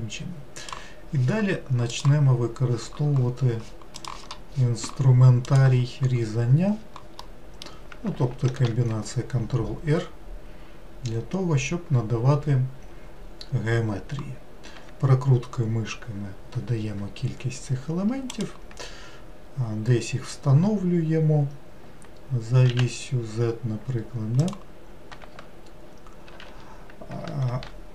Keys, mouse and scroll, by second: 7.2-8.5 middle drag, 8.5 ctrl+r, 26.3 ctrl+z, 27.5 ctrl+r.